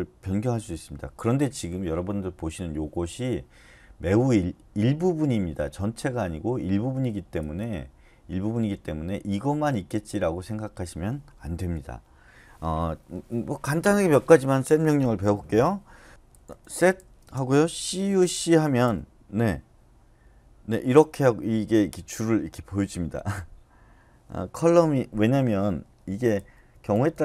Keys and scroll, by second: 11.6 Return, 16.3-18.2 typing, 18.8 Return, 26.3 Left, 26.7 Left, 26.9 Left, 27.1 Left.